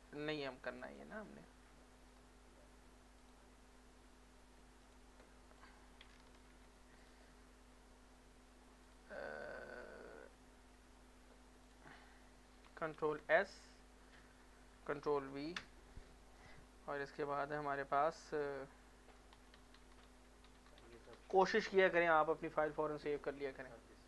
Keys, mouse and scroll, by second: 0.3 alt+right click, 0.8 alt+click, 1.1 alt+middle click, 1.6 scroll up 1, 3.2 click, 5.1 click, 6.5 ctrl+c, 7.0 click, 9.1 click, 11.6 click, 13.0 ctrl+s, 15.2 ctrl+v, 19.1-21.7 typing, 23.9 alt+Return.